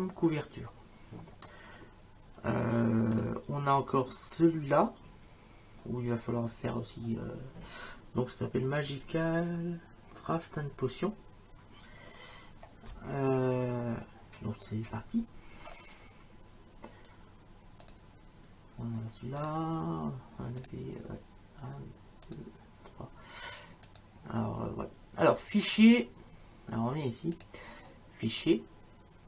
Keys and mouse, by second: 3.2 click, 17.9 click, 19.4 click, 20.6 click, 22.3 click, 23.9 click, 27.4 click.